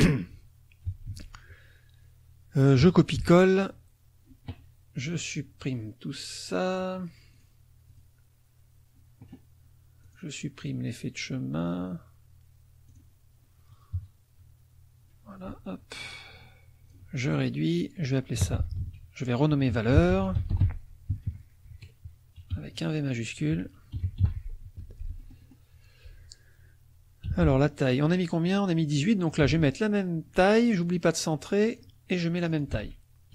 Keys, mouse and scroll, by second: 1.1 ctrl+c, 3.1 ctrl+v, 5.6 click, 7.3 click, 7.9 click, 10.0 click, 12.9 click, 14.0 KP_Subtract, 15.9-17.1 ctrl+shift+drag, 17.3 ctrl+shift+click, 18.4 t, 18.8 ctrl+a, 19.7-21.6 typing, 22.5 Left, 24.0 Delete, 24.2 shift+v, 24.8 F1, 25.2 click, 27.2 t, 27.9 click, 29.2 ctrl+click, 29.5 ctrl+a, 30.8-32.0 drag, 32.4 click, 32.8 ctrl+a.